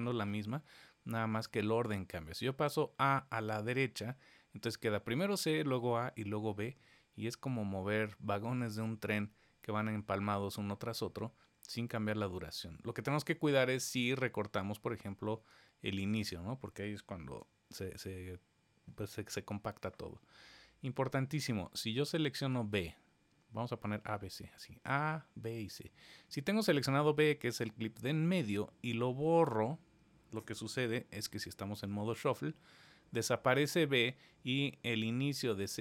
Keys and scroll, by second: 17.2 super+z.